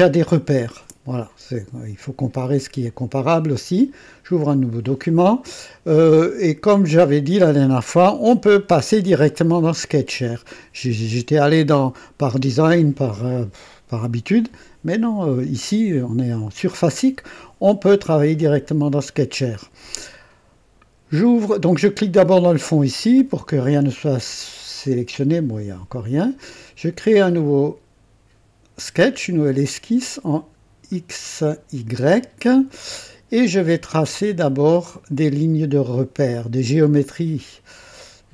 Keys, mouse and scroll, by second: 3.8 click, 6.2 click, 8.6 click, 22.3 click, 26.2 click, 29.5 click, 30.7 scroll down 1, 31.4 right click, 34.9 click.